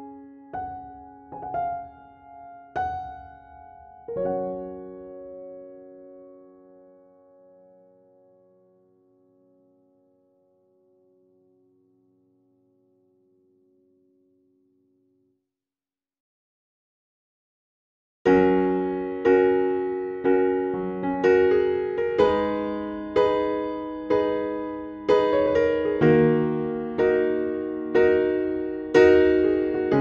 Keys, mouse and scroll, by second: 1.4-2.8 typing, 4.3 Down, 4.9 Down, 5.3 Down, 8.7 click, 9.6 scroll up 1, 10.2 click, 11.1 BackSpace, 11.9 scroll down 1, 14.5 click, 16.3 scroll up 1, 16.9 click, 17.6 scroll down 1, 18.7 scroll up 1, 19.4 click, 21.1-22.0 scroll down 1, 22.1 click, 24.5 scroll up 1, 25.5-30.0 drag.